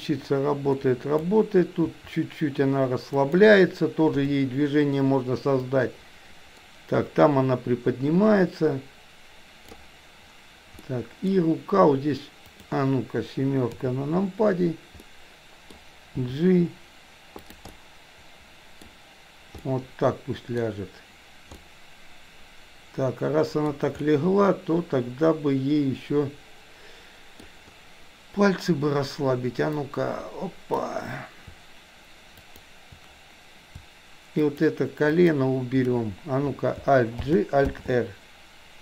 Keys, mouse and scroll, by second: 1.9 r, 4.1 i, 5.7-9.7 drag, 10.9-11.2 middle drag, 12.5 click, 13.7 KP_7, 15.0-15.7 middle drag, 16.2 g, 17.6-18.9 middle drag, 19.6-20.5 middle drag, 21.6-23.7 middle drag, 24.0-27.4 middle drag, 29.7-30.9 drag, 32.5 shift+click, 34.5 shift+click, 35.1 shift+click, 37.2 alt+g, 37.6 alt+r.